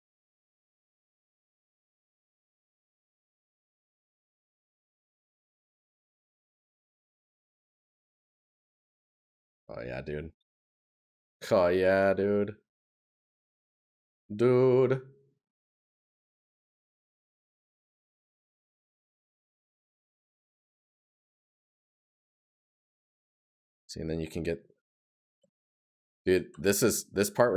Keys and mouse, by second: 7.6 right click, 15.5 right click, 20.0 right click, 22.1 right click, 26.5 right click.